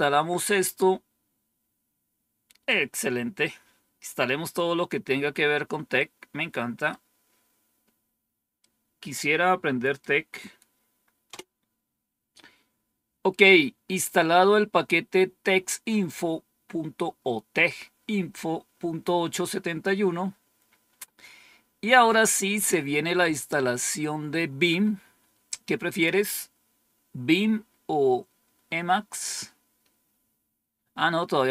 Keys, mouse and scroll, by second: 2.5-4.8 drag, 5.8 right click, 8.5-9.9 right drag, 11.2 Return, 21.2 scroll down 1, 21.9-22.7 scroll down 2, 23.0-23.6 scroll up 2, 30.0-30.7 scroll down 1, 30.9-31.5 scroll up 1.